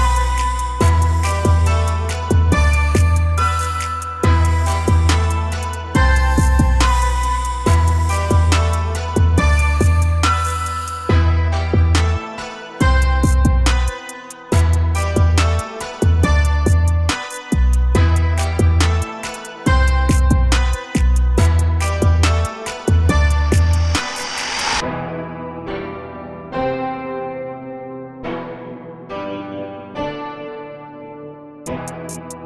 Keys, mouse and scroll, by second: 2.2 scroll down 1, 2.4 a, 2.6 a, 2.8 Tab, 3.1 a, 3.3 a, 3.4-4.5 scroll down 2, 4.5-6.2 shift+middle drag, 6.2 shift+a, 8.4 s, 10.5 KP_1, 11.5 g, 13.2 click, 15.8 a, 16.0 a, 16.3-16.8 middle drag, 16.8-17.4 scroll down 3, 17.4 KP_0, 18.5 click, 18.9 s, 20.0-20.8 scroll down 2, 20.8 KP_7, 21.5-21.8 scroll down 4, 22.2 g, 23.5 KP_0, 24.5 s, 25.8 a, 26.1-27.3 scroll up 1, 27.3 click, 28.2-31.0 drag.